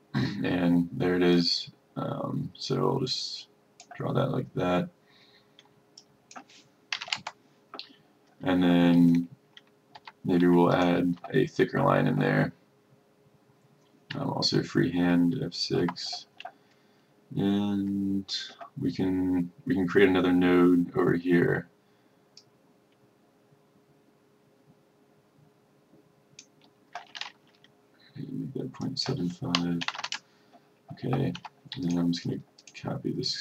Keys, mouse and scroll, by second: 7.1 KP_Decimal, 10.1 F1, 10.8 click, 15.9 F6, 22.5-26.6 drag, 29.7 KP_Decimal, 29.9 KP_7, 31.5 F1, 31.9-33.4 drag.